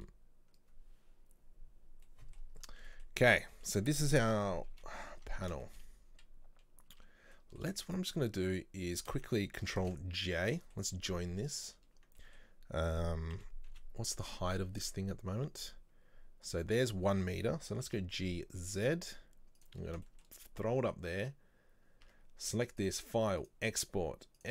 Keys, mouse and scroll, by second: 2.6-2.9 scroll up 2, 2.9-4.4 middle drag, 4.4 KP_3, 5.2 Tab, 5.7 shift+middle click, 6.0-6.8 scroll down 1, 7.0 Tab, 7.4 middle click, 7.9 shift+right click, 9.8 ctrl+j, 10.5 middle click, 12.2-13.4 middle drag, 13.4 KP_3, 14.2 Tab, 15.6 scroll down 1, 17.1 a, 20.1-22.1 shift+middle drag, 22.1 Tab, 22.9-24.5 drag.